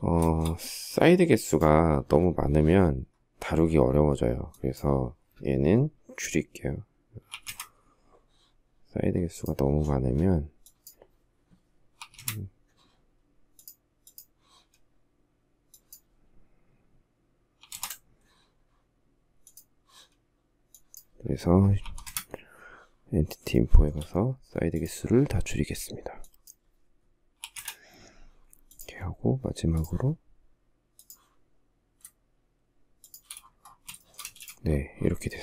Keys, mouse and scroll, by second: 6.6 3, 6.7 Return, 11.2 6, 11.4 Return, 16.8 7, 17.0 Return, 21.0 6, 21.3 Return, 22.7 shift+middle click, 26.6 6, 26.8 Return, 32.2 shift+click, 32.9 space, 33.2 shift+middle click, 33.5 space.